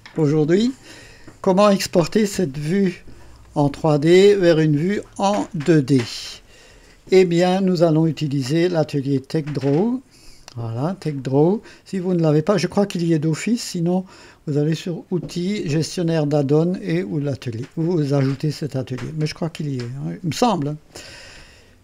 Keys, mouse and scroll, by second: 3.4-5.5 drag, 6.0 KP_2, 6.5 KP_1, 9.1 click, 10.8 click, 14.7 click, 18.7 click.